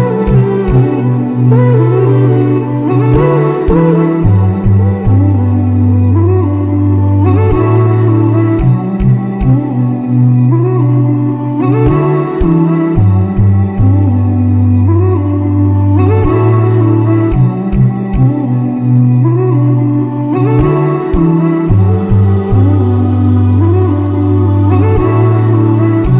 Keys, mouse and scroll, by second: 1.4-4.4 drag, 5.1-12.8 drag, 14.1-16.5 drag, 20.2-23.2 drag, 24.1-26.1 drag.